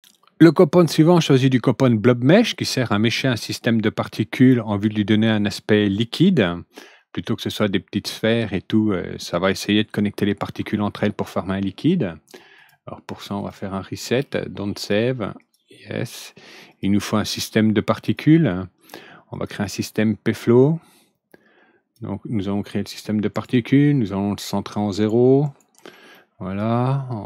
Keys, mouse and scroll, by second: 12.5 click, 13.3 click, 14.7 click, 15.3 click, 16.6 click, 18.0 click, 19.3 click, 20.4-21.9 drag, 23.3 right click, 24.9 right click, 25.4 right click, 26.1-26.8 middle drag.